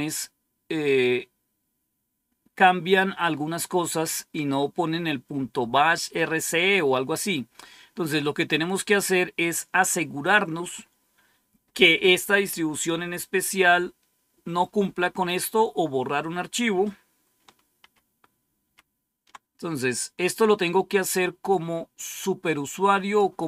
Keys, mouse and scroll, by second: 7.5-12.6 scroll down 1, 12.6 click, 17.7 ctrl+-, 18.6 ctrl+-, 22.5-23.4 drag.